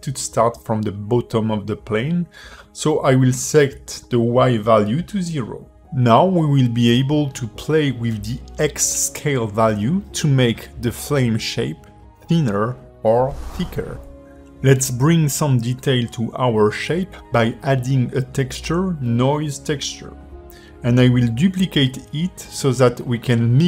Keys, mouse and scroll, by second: 4.2 click, 5.9 click, 13.9 click, 13.9 g, 14.9 click, 15.3-15.7 scroll up 3, 15.9 shift+a, 20.7 click, 21.1 shift+middle click, 21.9 shift+d.